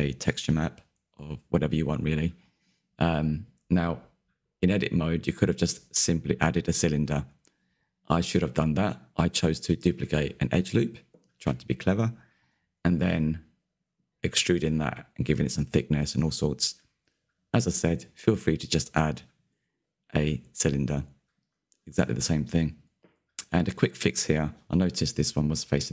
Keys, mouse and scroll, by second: 3.2 s, 4.9 click, 5.7-6.1 scroll down 2, 6.1-7.3 shift+middle drag, 7.3 Tab, 10.5 alt+click, 11.4 f, 12.0 Tab, 14.1-15.2 drag, 15.2-16.7 middle drag, 16.7-17.3 scroll down 6, 17.3-21.0 middle drag, 21.0 click, 22.2 /, 22.9 Tab, 23.4-24.8 middle drag, 24.8 3, 25.2 a.